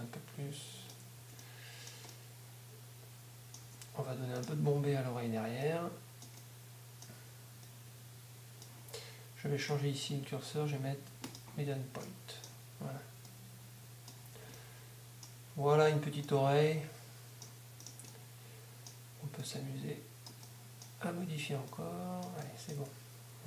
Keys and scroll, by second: 1.2 Tab, 3.6 Tab, 14.2 Tab, 22.8 Tab.